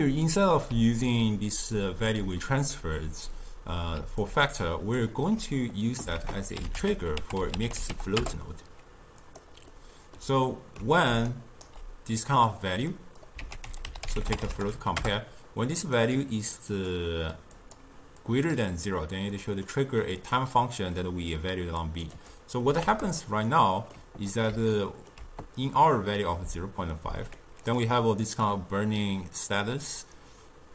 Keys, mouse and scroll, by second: 0.8 d, 1.2 click, 2.1 d, 4.0 d, 4.3 click, 5.0-5.4 d, 6.3 ctrl+a, 9.8-11.2 middle drag, 11.2 d, 11.4 right click, 11.8 d, 13.0 click, 13.5 ctrl+a, 16.8-19.4 drag, 19.4-20.5 middle drag, 20.5-24.0 drag, 24.0-30.5 middle drag.